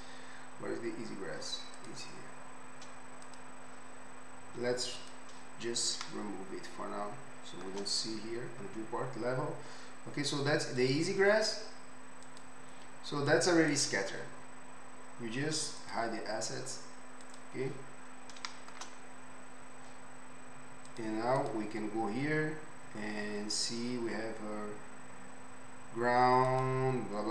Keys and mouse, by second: 7.3-27.3 shift+middle drag, 20.9 click, 20.9 right click, 21.4-24.1 drag, 21.4-24.1 right drag.